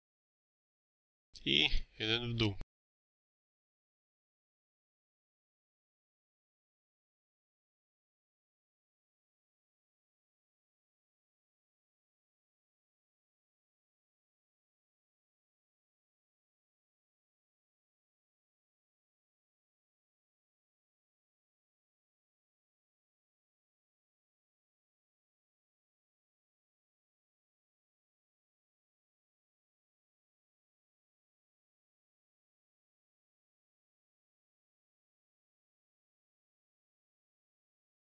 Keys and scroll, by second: 4.8 4, 4.8 0, 4.9 Return, 5.4 Escape, 10.4 Escape, 15.8 3, 15.9 6, 16.1 Return, 16.6 Escape, 21.7 3, 22.0 Return, 22.4 Escape, 26.2 2, 26.4 8, 26.5 Return, 26.8 Escape, 30.6 Escape, 37.2 2, 37.4 Return, 37.9 Escape.